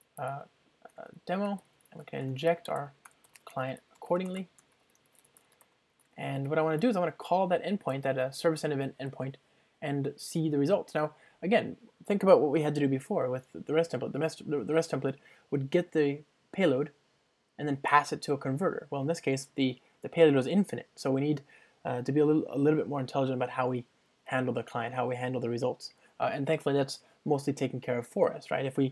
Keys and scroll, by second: 2.3 Return, 3.4 ctrl+space, 4.6 Return, 12.3 super+1.